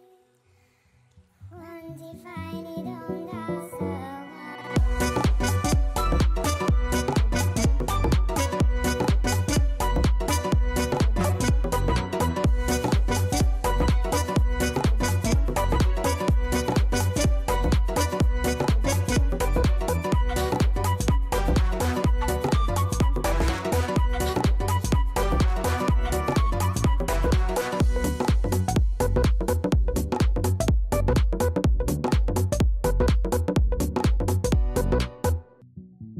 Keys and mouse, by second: 11.2 alt+click, 11.6 alt+right click, 11.8 alt+middle click, 12.1-13.5 alt+drag, 13.6 alt+middle click, 13.9 alt+click, 14.3 alt+right click, 14.8 alt+click, 15.1 alt+middle click, 15.1 alt+right click, 15.4 alt+click, 15.7 alt+middle click, 18.3 click, 19.8 click, 23.8 click, 26.9 click, 27.7 KP_5, 27.9 Return, 28.6 click, 29.4 KP_5, 29.5 Return, 35.6 click.